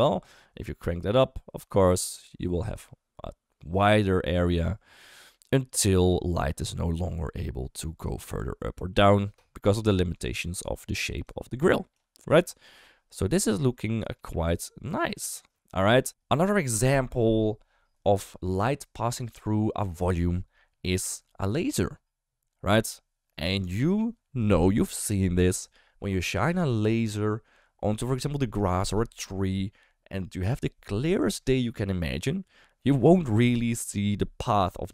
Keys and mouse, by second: 7.7-9.3 d, 8.1 click, 10.1 click, 11.1 d, 11.3 click, 12.0 d, 12.2 d, 12.3-14.2 right drag, 14.2 d, 15.1 click.